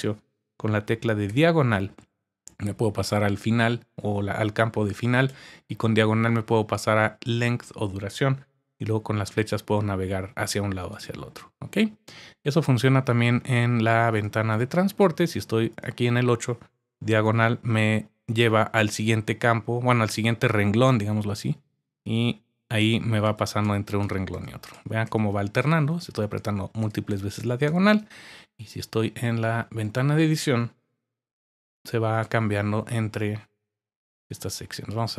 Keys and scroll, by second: 1.2 /, 5.3 typing, 8.7 Right, 9.6 Right, 9.6 Left, 10.0 Left, 17.2 typing, 20.9 typing, 21.9-23.6 typing, 31.5-32.2 typing.